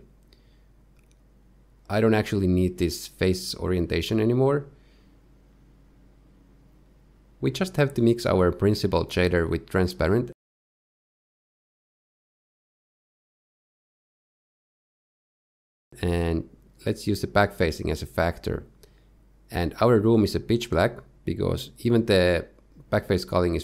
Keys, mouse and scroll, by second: 3.0 click, 5.2 middle click, 6.5 click, 7.5-7.9 scroll down 1, 8.4 shift+middle click, 8.9 shift+a, 13.8 ctrl+shift+right click, 14.8 shift+middle click, 15.2 click, 16.0 click, 16.8 click, 23.3-23.6 scroll down 1.